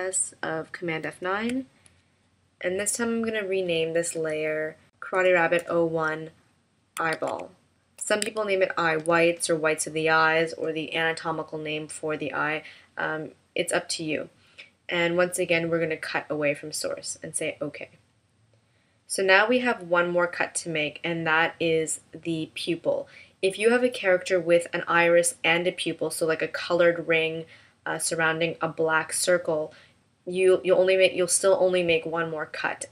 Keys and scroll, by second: 1.0 super+F9.